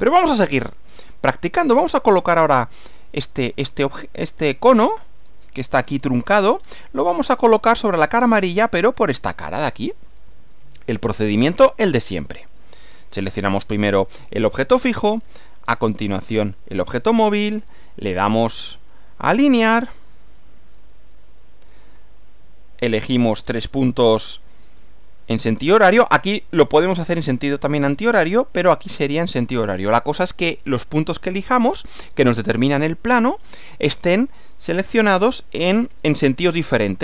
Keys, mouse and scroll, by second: 0.0-1.6 middle drag, 11.6 middle click, 13.5 click, 16.4 ctrl+click, 18.1 click, 18.8 click, 19.8 click, 22.0-23.4 middle drag, 23.4 scroll up 2, 24.2-25.2 shift+middle drag, 25.6 scroll up 1.